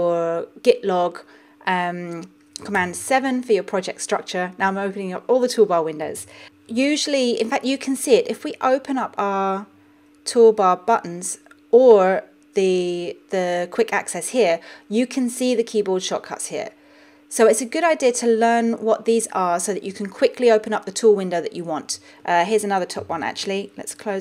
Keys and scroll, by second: 3.5 super+7.